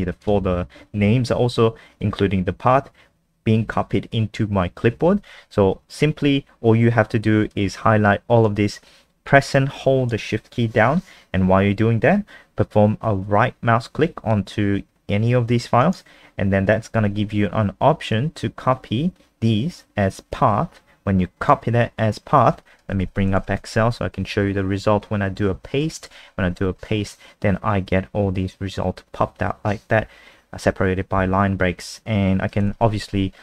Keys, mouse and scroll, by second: 0.2 click, 15.8 shift+right click, 21.4 click, 22.8-24.0 typing, 26.1 ctrl+v, 32.6 super+n.